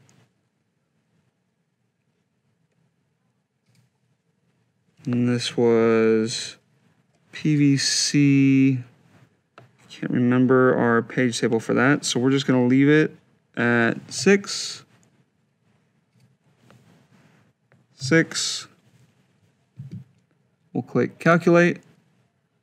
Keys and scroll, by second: 13.9 6, 17.8 6.